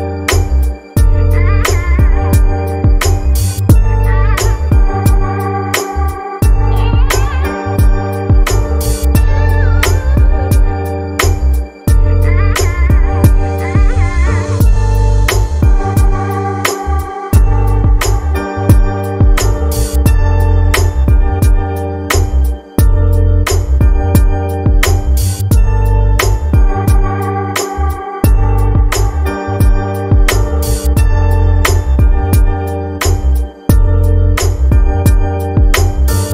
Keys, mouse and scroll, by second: 0.9-4.9 drag, 8.8 click, 9.9-14.2 drag, 17.6 space.